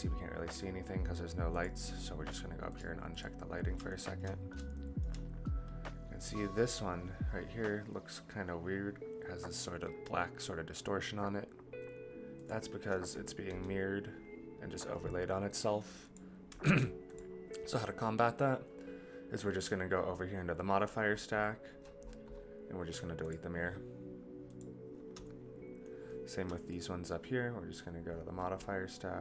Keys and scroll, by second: 13.5 g, 16.6 ctrl+z.